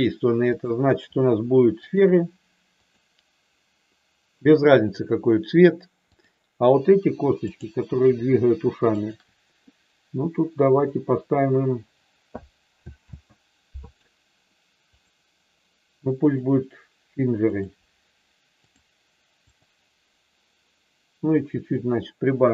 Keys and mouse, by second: 0.5-2.0 drag, 2.9 click, 7.3 click, 8.8 shift+click, 10.7 click, 13.1 ctrl+z, 14.9-16.5 drag, 17.5-18.8 drag, 19.6 click, 21.6-22.5 drag.